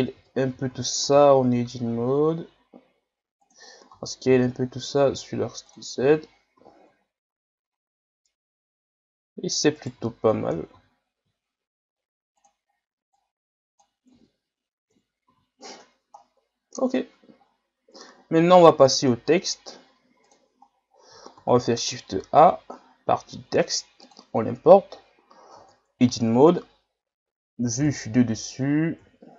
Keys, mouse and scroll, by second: 0.2 Tab, 0.5 a, 0.7 a, 1.0 a, 1.8 s, 3.9 s, 6.0 Tab, 6.6 a, 6.8 scroll down 6, 7.7 scroll up 7, 8.2-9.8 middle drag, 9.8 right click, 10.0 Tab, 10.4 a, 10.7 a, 11.2 s, 13.1-14.2 drag, 14.2 Tab, 14.9 KP_1, 15.2 a, 15.7-16.3 scroll down 11, 16.8-17.5 scroll up 10, 18.0-19.3 scroll down 5, 20.2 click, 21.0-21.3 scroll down 1, 21.3 shift+a, 25.0 scroll up 2, 25.5 Tab, 27.9 KP_7, 29.0 KP_7.